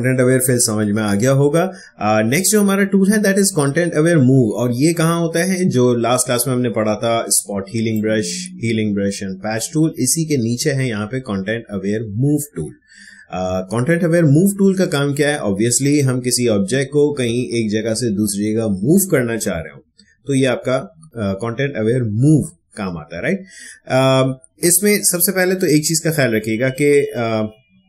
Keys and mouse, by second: 7.9-17.9 drag.